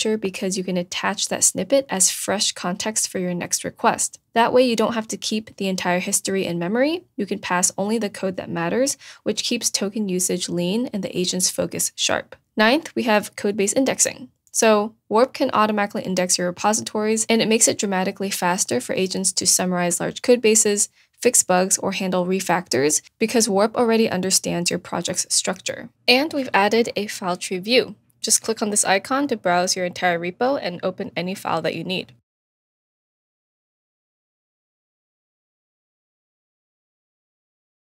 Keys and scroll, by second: 0.0 super+a, 0.3 super+c, 4.2 BackSpace, 6.6 shift+?, 6.8 shift+Return, 6.9 super+v.